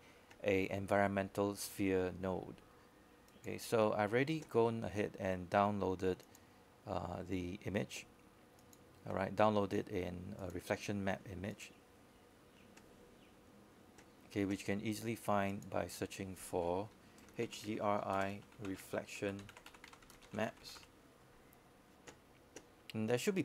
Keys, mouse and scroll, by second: 18.4-22.1 typing.